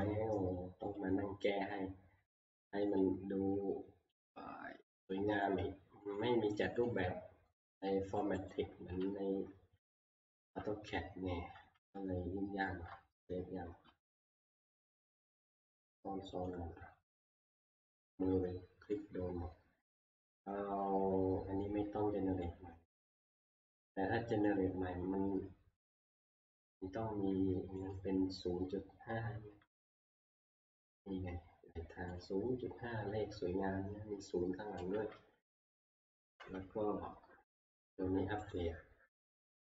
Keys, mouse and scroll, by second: 0.0 click, 1.0 click, 3.0 click, 5.4 click, 6.2 middle click, 6.7 click, 6.9 click, 7.8 middle click, 8.5 click, 9.1 ctrl+s, 10.4 alt+Tab, 11.6 alt+Tab, 13.9 ctrl+q, 14.5 ctrl+q, 14.7 ctrl+a, 16.5 click, 17.5 click, 18.1 ctrl+q, 19.0 click, 23.0 middle click, 23.1 middle click, 24.5 click, 26.8 click, 28.0 click, 32.2 click, 34.9 alt+Tab, 36.2 alt+Tab, 36.4 alt+Tab, 38.5 right click.